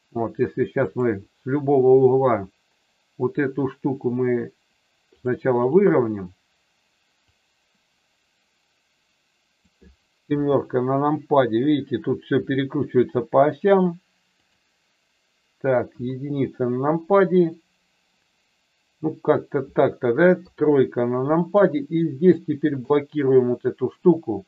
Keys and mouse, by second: 0.8 click, 5.0 click, 5.6 click, 7.3-9.6 drag, 10.3 KP_7, 12.3 r, 14.4 click, 15.8 KP_1, 20.4 KP_3, 22.2 click, 22.7 click.